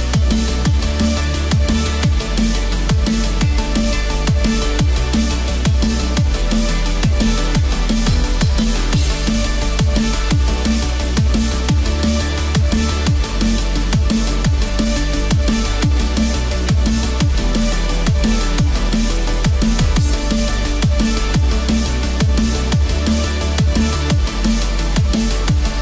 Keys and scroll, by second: 7.2 ctrl+0, 12.7 ctrl+0.